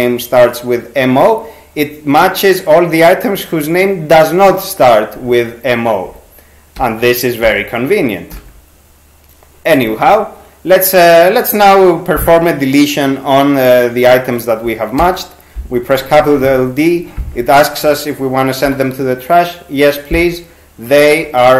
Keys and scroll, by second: 6.8 t, 7.5 t, 8.3 t, 15.0 shift+d, 18.7 y.